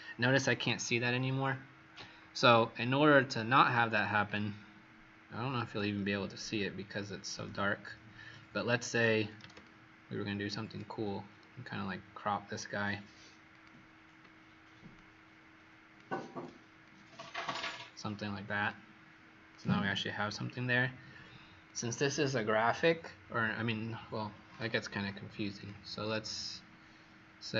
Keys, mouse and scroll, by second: 2.4-3.5 scroll up 5, 4.2 click, 5.2 scroll down 3, 7.5-8.2 alt+scroll down 1, 9.6 ctrl+shift+click, 13.5 click, 14.9 alt+shift+click, 19.4 click.